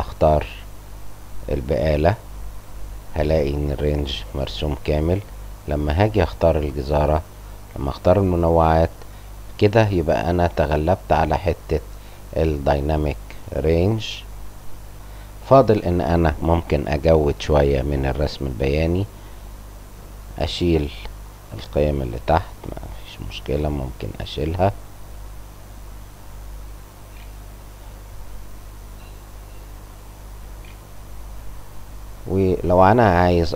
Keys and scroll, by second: 22.5 Print, 22.5 Return, 22.6 =.